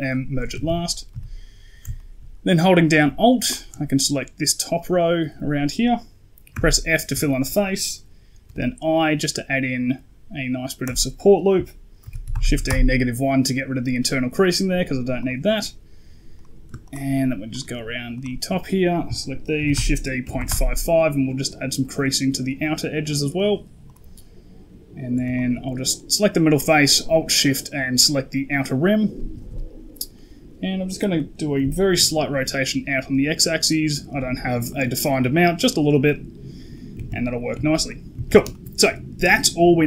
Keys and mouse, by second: 0.4 a, 0.5 a, 1.0 z, 1.8 shift+click, 3.4 alt+click, 6.4 f, 7.1 shift+click, 8.3 i, 11.9 shift+e, 15.1 click, 16.2 right click, 16.7 ctrl+click, 17.4 ctrl+click, 19.4 shift+e, 23.2 click, 23.7 right click, 25.2 alt+shift+right click, 28.5 middle click, 29.4 KP_Decimal, 30.0 middle click, 31.0 middle click, 31.4 r, 34.6 middle click, 35.9 middle click, 36.6 middle click, 36.8 a, 37.0 a, 37.4 Tab, 37.7 middle click, 38.0 a, 38.1 a, 38.4 shift+middle drag.